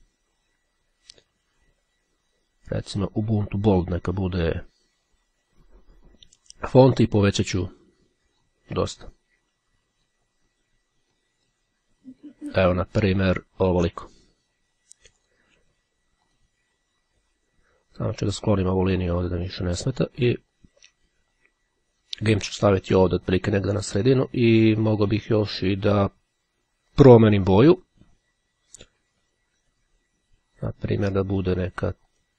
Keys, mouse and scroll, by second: 2.5-3.6 drag, 5.5-7.4 drag, 9.2-10.7 drag, 11.6 click, 15.3 click, 16.4 click, 17.8-20.0 drag, 20.7-24.4 drag, 25.4 click, 26.6-27.7 drag, 30.4-32.3 drag.